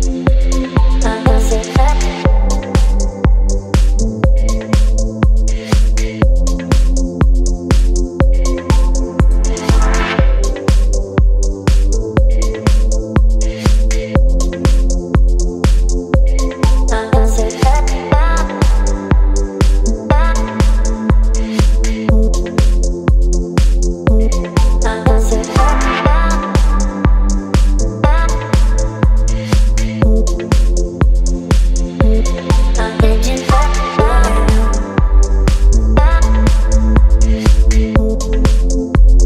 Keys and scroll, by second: 3.4 ctrl+t, 17.4 Return, 19.1 space.